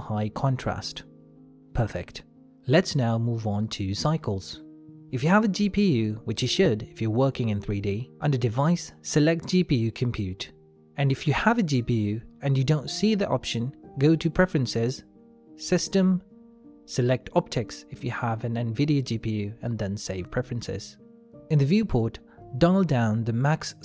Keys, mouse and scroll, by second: 0.6 click, 4.0-6.0 scroll up 1, 6.0 click, 10.3 click, 15.4 click.